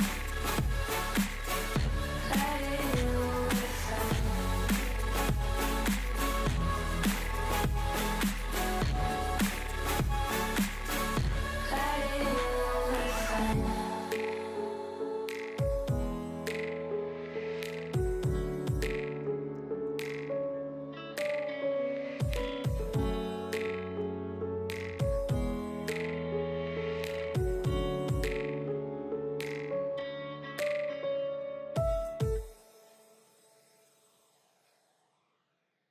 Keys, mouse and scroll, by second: 0.0-1.0 middle drag, 1.0 scroll down 2, 1.1-2.5 middle drag, 3.8 scroll down 1, 3.9-5.5 shift+middle drag, 6.3 click, 6.6 click, 6.7-7.2 scroll down 1, 7.2 Left, 7.4 Left, 7.6 Left, 7.8 Left, 8.0-8.5 scroll down 1, 8.5 Left, 8.8 Left, 9.1 Left, 9.4 Left, 9.7 Left, 10.0 Left, 10.3 Left, 10.8-11.3 scroll down 3, 11.3 Left, 11.6 Left, 11.9 click, 12.6 scroll down 3, 12.8-14.0 drag, 12.8 middle click, 14.0 a, 14.5 m, 18.5 Left, 18.5 Left, 21.1 click, 21.7 a, 22.0 shift+click, 22.6 click, 23.1 middle click, 23.6 click, 23.9-24.3 middle drag, 27.8 middle click.